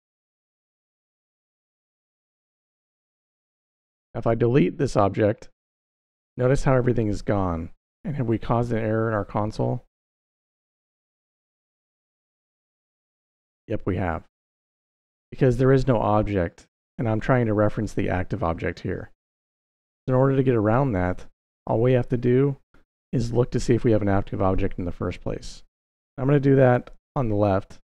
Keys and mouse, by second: 3.4 x, 9.0 click, 22.9 middle click, 23.9-25.3 drag, 26.5 g.